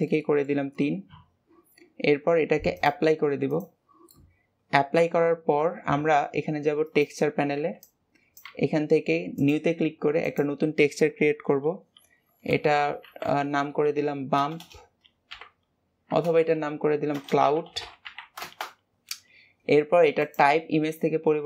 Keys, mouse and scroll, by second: 2.7-4.0 drag, 4.0-6.8 middle drag, 6.8 click, 9.3-13.3 drag, 14.5 BackSpace, 20.1-21.4 drag.